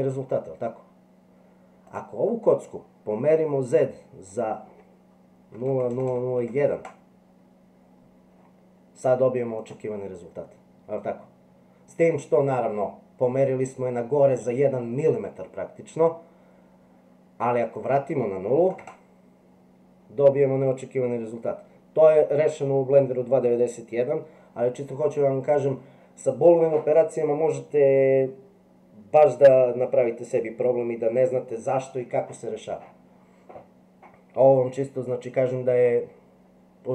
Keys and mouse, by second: 1.9 click, 4.3-8.3 drag, 6.1 KP_0, 9.6 click, 17.8-34.2 drag, 35.7 click.